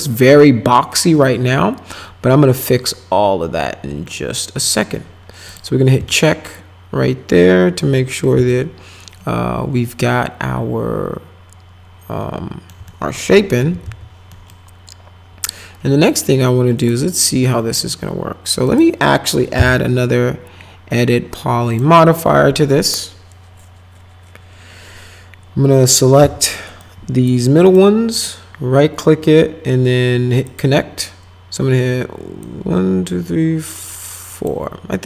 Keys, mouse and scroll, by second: 0.4 middle click, 5.5 click, 6.1-7.8 alt+middle drag, 8.0 middle click, 8.5-12.7 alt+middle drag, 12.8 middle click, 13.3-14.3 typing, 14.3 middle click, 16.8 click, 18.7 click, 19.5 e, 21.7 click, 26.2 2, 26.8 click, 27.7 right click, 30.5 click, 32.4-34.5 drag.